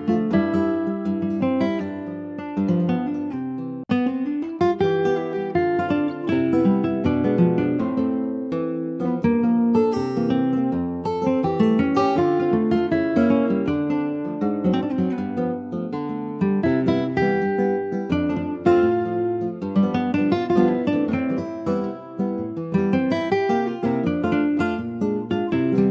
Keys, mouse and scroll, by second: 0.1 ctrl+s, 0.2 click, 0.4-1.1 scroll down 7, 0.6 click, 1.1 middle click, 1.6 ctrl+s, 1.8 click, 2.1 scroll up 2, 2.5 shift+middle click, 2.8 scroll up 1, 3.2 middle click, 3.4 ctrl+s, 3.5 click, 3.9 shift+middle click, 4.1-4.4 shift+scroll up 3, 4.4 middle click, 4.8 Tab, 5.0 click, 5.4-5.9 scroll up 3, 5.9 shift+middle click, 6.2 3, 6.4 click, 6.7-7.0 scroll down 2, 7.0 alt+middle click, 7.4 alt+middle click, 8.0 ctrl+s, 8.3 click, 9.1 shift+middle click, 10.0 e, 12.2 middle click, 12.5-12.8 scroll up 2, 12.8 shift+middle click, 13.2 click, 13.7 alt+shift+click, 15.9 e, 16.6 alt+s, 19.5 middle click, 19.8 scroll up 2, 20.0 3, 20.2 click, 21.3 2, 22.1 click, 22.8 alt+shift+click, 23.2-24.2 middle drag, 24.2 s, 25.7 ctrl+b.